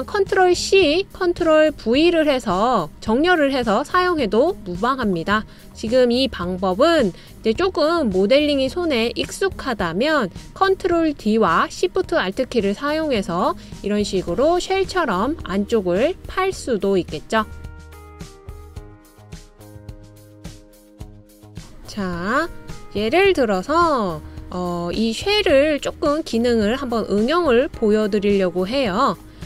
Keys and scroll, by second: 24.2 super+c, 24.6 super+v.